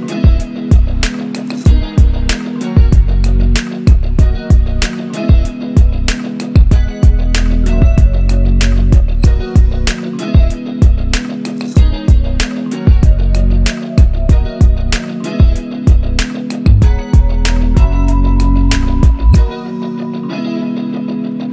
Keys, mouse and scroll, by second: 18.4 scroll down 1, 19.6 click, 19.8 Up.